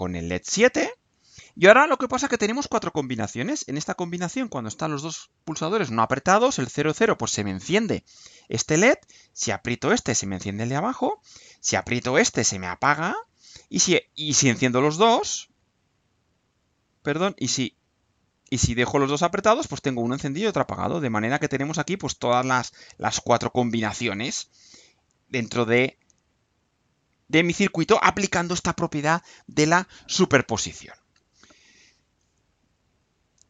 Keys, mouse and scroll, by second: 33.0 click.